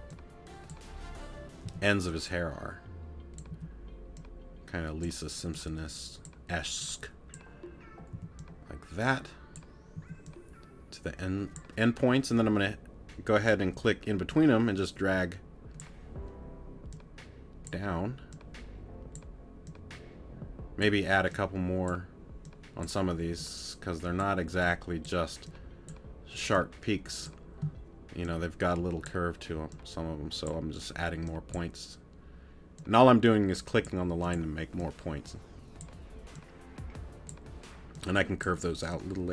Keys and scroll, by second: 1.6 t, 3.5 a, 8.1 t, 10.0 a.